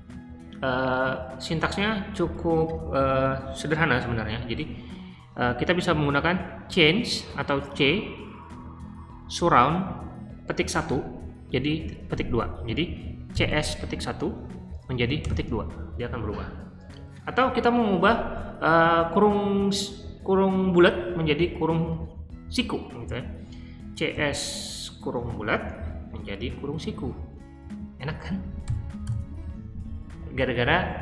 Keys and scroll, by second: 13.0-15.2 typing, 23.8 typing, 25.4 (, 26.7 [, 28.6-29.0 typing, 30.9-31.0 typing.